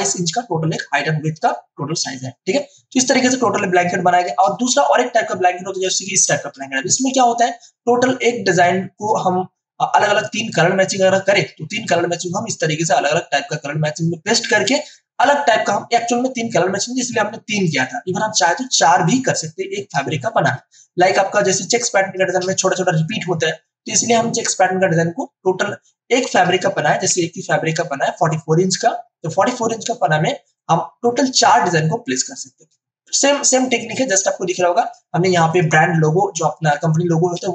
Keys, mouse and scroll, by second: 1.8 ctrl+d, 3.2 space, 3.4 click, 3.7 space, 6.0 click, 6.6 space, 6.9 click, 7.1 space, 7.9 space, 8.9 ctrl+alt+click, 20.0 space, 20.4-27.0 ctrl+alt+drag, 27.0 ctrl+alt+c, 30.5 click, 32.8 space, 33.2-37.5 ctrl+drag.